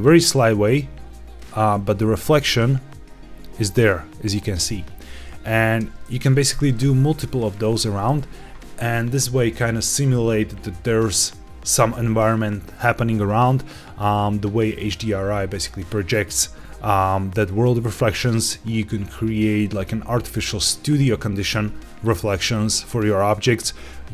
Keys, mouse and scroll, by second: 1.2 click, 2.3-2.9 scroll up 2, 4.6-5.4 scroll down 2, 5.4 scroll down 2, 5.7 shift+d, 6.1 shift+z, 7.4 click.